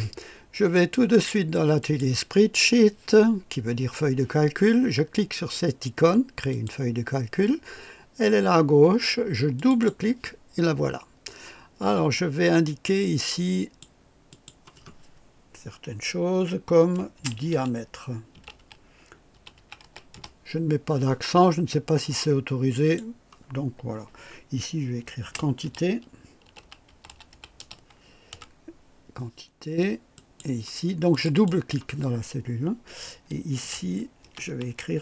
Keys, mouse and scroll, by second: 0.7 click, 1.8 click, 6.5 click, 9.5 click, 12.8 click, 14.3 click, 16.9-20.6 typing, 22.7 click, 25.2-28.0 typing, 28.3 Delete, 30.1 click, 31.1 click, 31.6-35.0 typing.